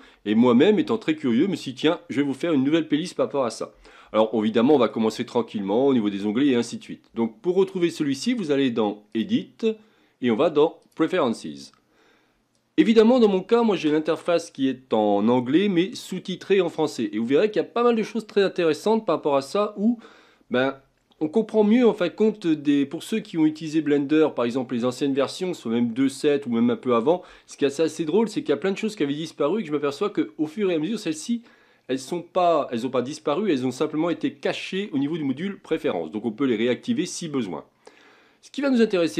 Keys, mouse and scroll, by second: 1.7-2.2 scroll up 2, 2.2-4.2 scroll down 2, 4.2-7.3 shift+middle drag, 9.1-12.2 drag.